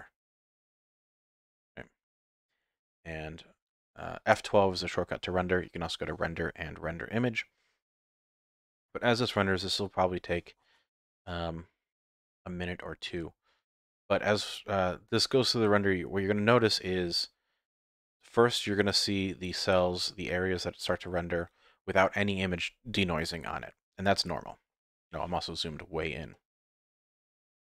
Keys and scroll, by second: 6.2 F12.